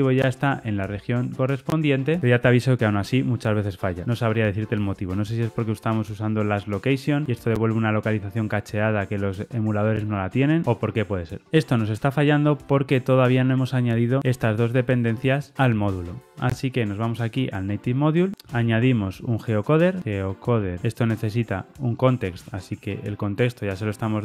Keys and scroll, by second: 20.8 Return, 22.9 super+p, 23.9 alt+super+l.